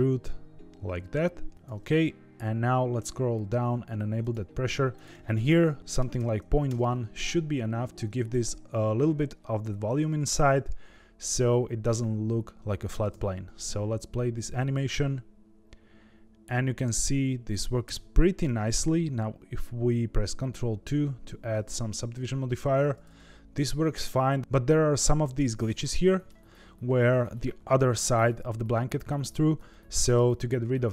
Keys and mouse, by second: 4.1 click, 5.0-7.2 drag, 7.8 Tab, 13.0 space, 17.8 space, 20.8 ctrl+2, 22.8-23.9 middle drag, 25.8-26.2 middle drag, 29.6-30.1 middle drag.